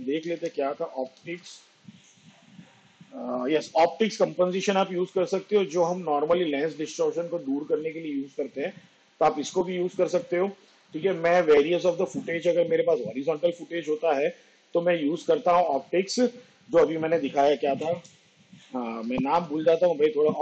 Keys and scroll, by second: 0.3 o, 0.6 p, 1.1 t, 1.5 i, 17.9 o, 18.3 p, 19.4 i.